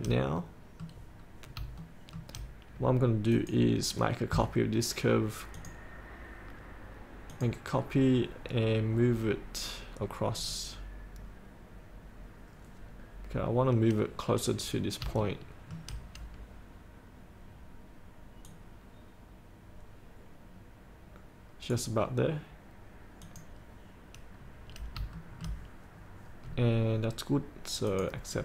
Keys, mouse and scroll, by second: 0.5 middle click, 1.4 scroll down 1, 2.0 shift+middle click, 3.4 click, 13.0-15.1 scroll up 1, 15.3 shift+middle click, 18.6-22.0 drag, 24.4-24.9 scroll down 1, 24.9 scroll up 1, 25.2 shift+middle click, 26.5 scroll down 1, 28.0 click, 28.2 click.